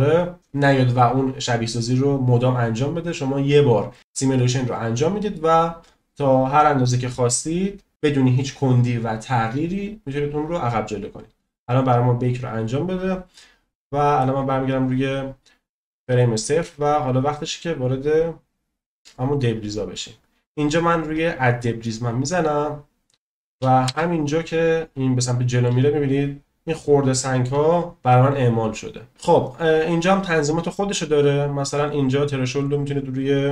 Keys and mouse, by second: 5.8-6.4 drag, 10.0-13.0 drag, 21.8 click, 24.0 space, 25.3 middle click, 26.7-27.5 shift+middle drag, 32.8-33.5 drag.